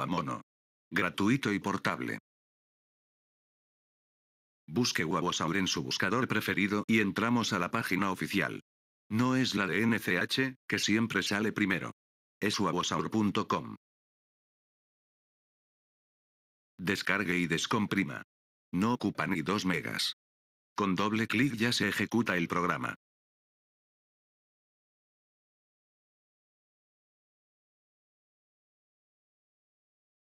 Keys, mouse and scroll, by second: 4.3-5.3 drag, 7.8-8.8 drag, 10.3-11.3 drag, 14.3-14.9 drag, 16.4 click, 17.6 click, 19.4 click, 21.6 right click, 24.8 right click, 26.8 click, 29.1 right click.